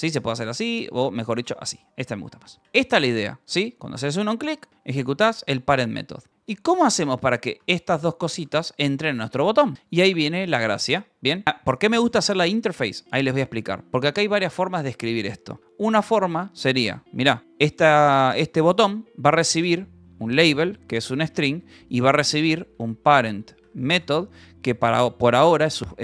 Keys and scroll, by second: 0.0-3.9 typing, 0.7 Escape, 5.3-9.7 typing, 10.8-14.2 typing, 17.4 {, 19.9-26.0 typing.